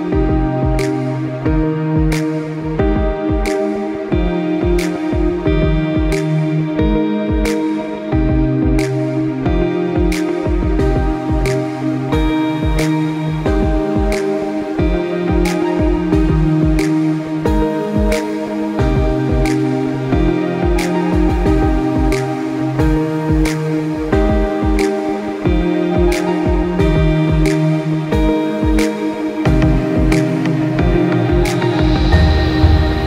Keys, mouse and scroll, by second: 3.2 click, 4.8 click, 9.8 click, 11.2 click, 12.9 click, 20.4 click, 23.7-25.6 scroll up 1, 25.6 scroll up 1, 26.1-26.7 scroll down 1, 27.3-27.6 scroll up 1, 27.6-28.1 scroll down 1, 28.1 scroll up 1, 28.4-29.0 scroll down 1, 29.0-30.1 scroll up 1, 31.5-32.0 scroll up 1, 32.3-33.0 scroll down 1.